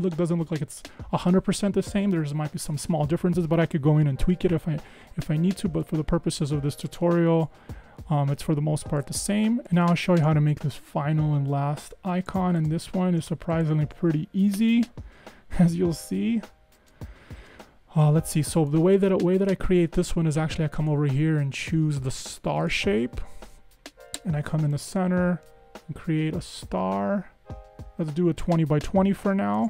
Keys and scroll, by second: 7.5 BackSpace, 14.7 BackSpace.